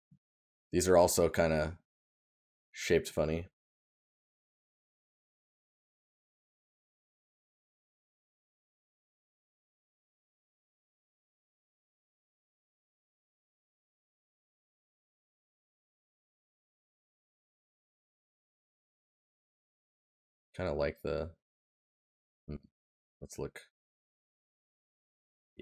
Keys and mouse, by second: 10.1 right click, 13.3 right click, 22.7 right click.